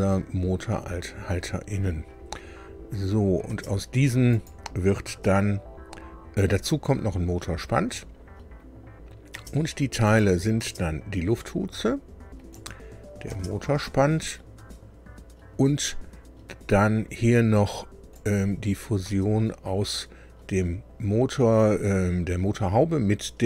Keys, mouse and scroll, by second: 1.5-1.8 scroll down 2, 3.4 space, 4.3 click, 5.0 space, 9.3 space, 10.0 click, 10.6 space, 12.5 click, 13.3 space, 18.1 click, 19.0 space.